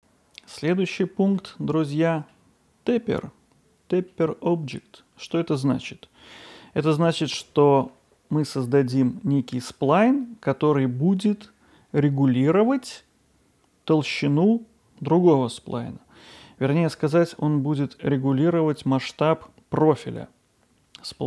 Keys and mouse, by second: 0.7 middle click, 1.9-2.3 middle drag, 4.1-5.3 middle drag, 6.0-6.6 middle drag, 7.3-7.8 middle drag, 20.1-21.2 middle drag.